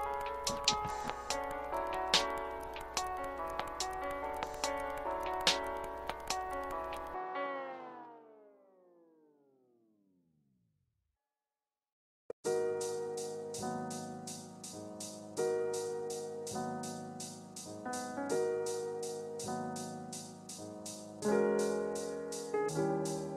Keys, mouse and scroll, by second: 0.3-2.4 typing, 3.0 ctrl+space, 3.1 ctrl+click, 3.5 ctrl+space, 3.8 ctrl+space, 3.8 ctrl+click, 6.5 f, 7.7-8.0 scroll down 1, 10.1 click, 11.4 space, 11.7 click, 11.9 space, 12.9 space, 14.8 click, 16.0 typing.